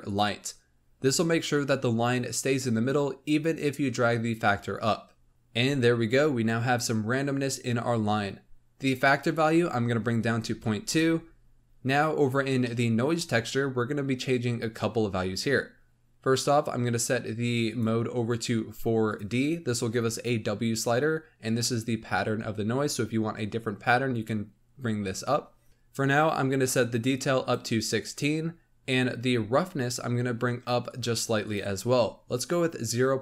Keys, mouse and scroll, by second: 5.3 click, 9.0-12.0 drag, 12.3 scroll up 1, 12.5-16.3 middle drag, 17.6-20.6 drag, 26.9-29.1 drag, 29.1-29.6 scroll up 5, 30.8-33.2 drag.